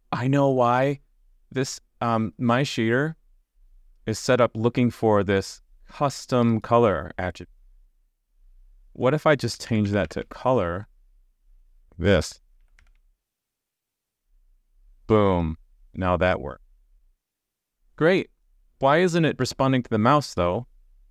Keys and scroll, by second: 13.4 super+s.